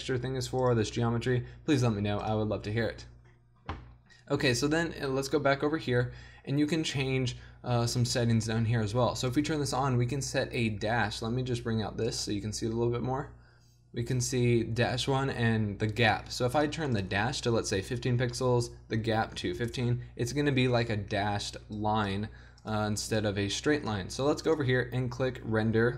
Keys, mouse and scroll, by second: 6.6-9.3 middle drag, 9.3-21.6 drag, 21.8-22.4 drag.